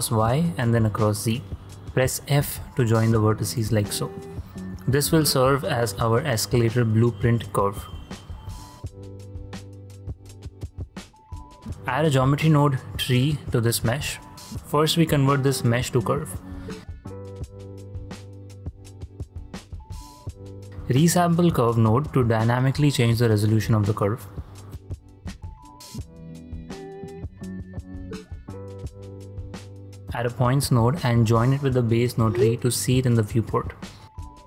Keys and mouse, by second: 0.9 ctrl+m, 1.2 z, 1.7 Return, 2.9 click, 3.8 shift+click, 5.0 f, 5.7 click, 6.6 shift+click, 7.5 f, 8.0 click, 10.8 Tab, 12.1 click, 13.7 Home, 15.6 shift+a, 19.3 click, 20.4 ctrl+click, 25.7 click, 27.7-30.0 drag, 30.0 shift+a, 33.9-34.4 ctrl+drag.